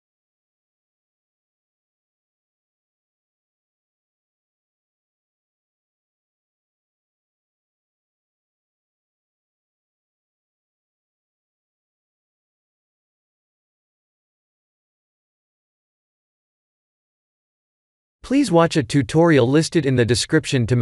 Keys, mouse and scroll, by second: 0.5 click, 3.2 ctrl+s, 11.6 click, 13.8 click, 17.0 click, 20.4 click.